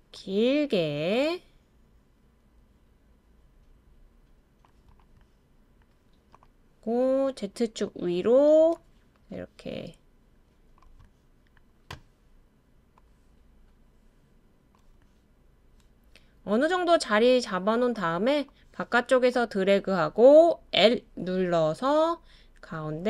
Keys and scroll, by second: 20.8 i.